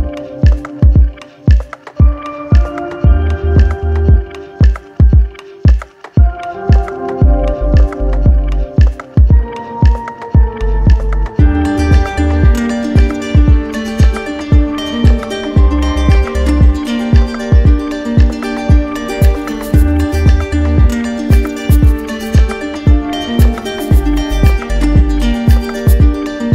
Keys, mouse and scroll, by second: 0.3 ctrl+click, 3.2 ctrl+click, 5.0 ctrl+click, 6.5 alt+click, 10.0 click, 14.3 click, 15.8 alt+click, 17.2 alt+click, 18.0 alt+click, 19.0 click, 20.9 click, 23.0 alt+click, 23.8 click, 24.5 shift+click, 25.7 shift+click, 26.3-26.5 drag.